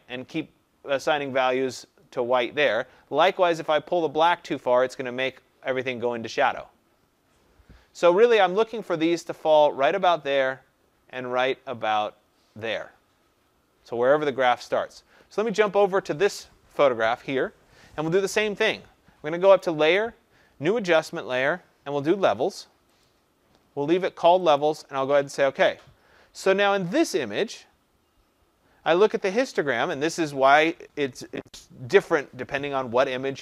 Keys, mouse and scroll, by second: 2.7 click, 5.1-12.2 drag, 15.8 click, 23.0 click, 24.5 click.